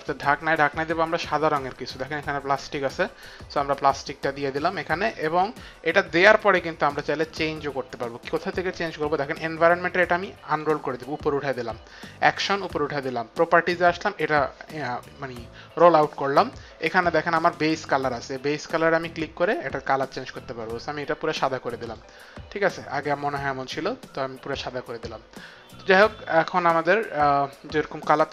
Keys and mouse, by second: 0.0 click, 3.3 click, 6.1 click, 10.5 click, 12.2 click, 13.8 click, 18.1 click, 19.4 click, 21.8 click, 22.9 click, 26.0 click.